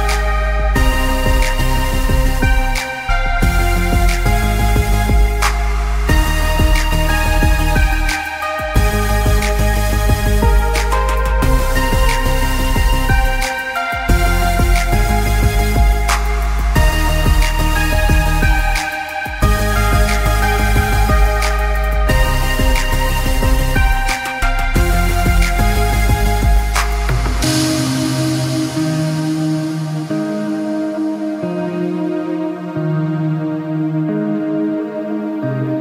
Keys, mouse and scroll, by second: 1.8 scroll down 3, 2.0 scroll up 3, 2.3 alt+scroll down 2, 2.5 scroll up 1, 2.6-2.9 scroll down 1, 3.0 click, 4.8 z, 5.0 click, 6.1 scroll up 1, 6.6 scroll down 1, 6.8 click, 7.8 click, 8.4 click, 14.6 click, 15.3 space, 16.0 click, 17.6 scroll up 1, 17.9 click, 20.4 click, 21.2 scroll up 1, 21.6 click, 23.0 click, 23.5 click, 26.4 scroll down 1, 26.8-27.2 scroll up 2, 27.4 click, 27.7 z, 27.8 click, 28.6 scroll up 1, 28.7 click, 29.4 click, 31.0 scroll down 1, 31.4 scroll up 1, 31.8 scroll down 1, 32.2 ctrl+s, 32.9-33.8 scroll down 3, 33.1 click, 34.0 click, 34.9 click, 35.2 click.